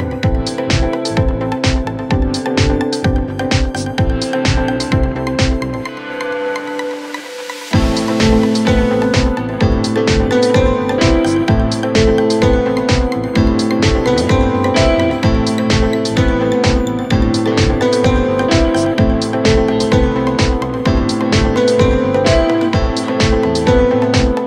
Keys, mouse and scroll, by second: 0.6 scroll down 3, 0.8 middle click, 1.3 scroll up 4, 1.5 middle click, 1.9 scroll up 3, 2.0-6.3 typing, 2.2 double click, 4.3 scroll down 1, 4.5 middle click, 5.4 scroll up 1, 8.4-10.1 typing, 9.2 ctrl+z, 11.2 double click, 11.7 shift+click, 12.1 shift+click, 12.4-14.2 typing, 14.6 scroll up 7, 15.4 typing, 17.4-18.2 typing, 18.3 Return, 19.2-19.6 scroll down 15, 19.8 scroll up 4, 20.2 middle click, 20.6 middle click, 20.9 scroll down 1, 21.0 middle click, 21.3 scroll up 5, 21.5 middle click, 22.0 scroll down 1, 22.2 middle click, 23.3 scroll down 1, 24.1 scroll down 4, 24.2 middle click.